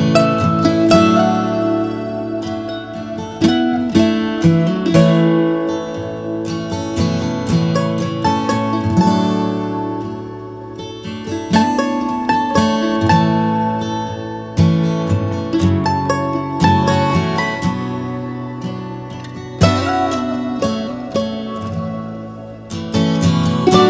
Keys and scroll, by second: 4.9 Left, 5.2 Left, 5.4 Left, 10.1 Up, 19.1 Up, 19.1 Right, 19.4 Right, 21.8 Right, 22.0 Right, 22.2 Right, 22.6 Right, 23.0 Right.